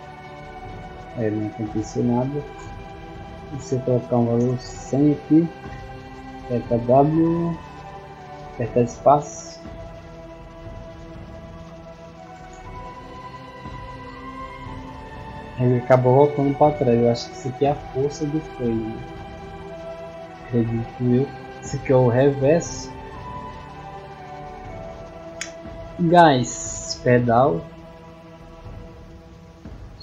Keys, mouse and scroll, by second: 0.7 d, 2.4 space, 5.8 w, 8.5 space, 11.5-13.1 typing, 14.3 space, 20.2 middle click, 23.2 click, 29.2 middle click.